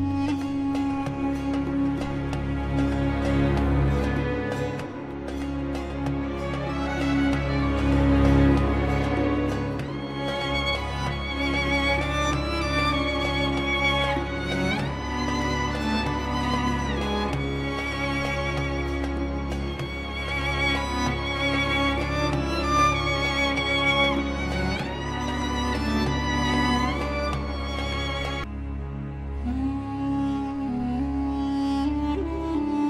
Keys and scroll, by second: 0.4 Escape, 3.6 ctrl+Page_Down, 10.7 F2, 15.4 Escape, 17.3 ctrl+r, 18.3 F3, 22.3 ctrl+z, 24.1 Escape, 30.4 space, 30.6 Escape, 31.4 Delete.